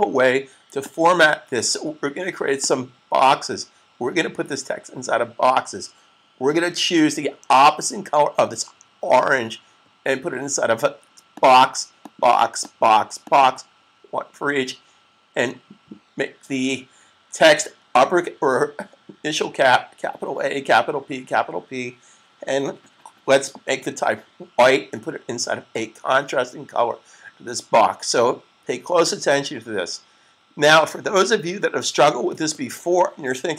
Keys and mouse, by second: 0.7 click, 11.2 click.